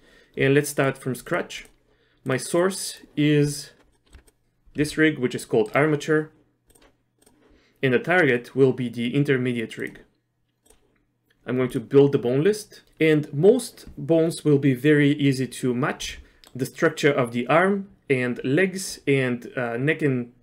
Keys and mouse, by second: 0.8 click, 1.2 click, 1.6 click, 2.2 click, 2.6 click, 4.1 middle click, 4.1 Tab, 4.2 click, 4.8 g, 6.7 click, 16.4 middle click.